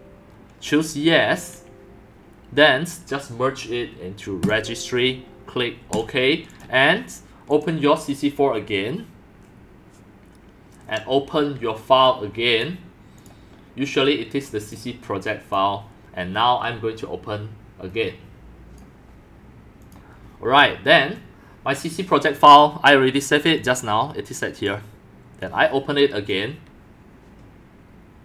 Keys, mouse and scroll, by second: 6.9 click, 7.5 click, 7.9-8.3 drag, 10.9 click, 15.4 click, 17.9 click, 18.8 click, 22.0 click, 22.4 drag, 23.6-24.9 drag, 25.2 click, 25.6 click.